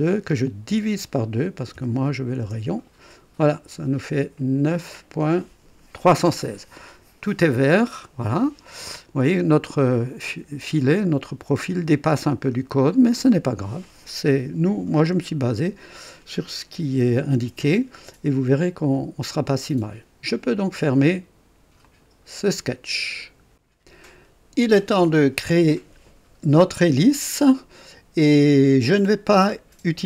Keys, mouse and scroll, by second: 0.6 KP_Divide, 0.8-1.7 typing, 2.4 KP_Enter, 7.6-8.1 scroll down 2, 8.8 right click, 12.3-12.6 scroll down 2, 21.8 click, 23.5 click.